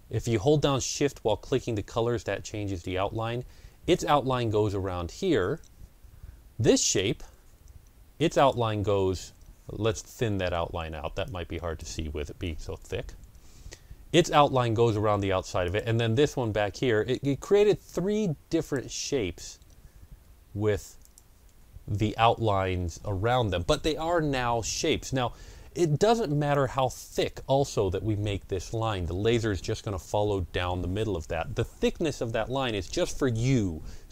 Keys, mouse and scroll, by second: 6.7 shift+click, 8.2 shift+click, 11.1 shift+click, 11.1-15.5 shift+drag, 12.4 KP_1, 12.6 KP_Enter, 20.9 shift+double click, 26.4-29.3 shift+drag.